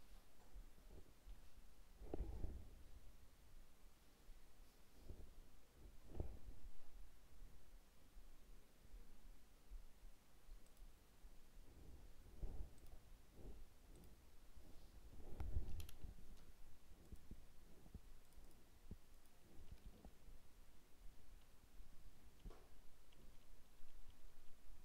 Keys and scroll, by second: 19.8 ctrl+z.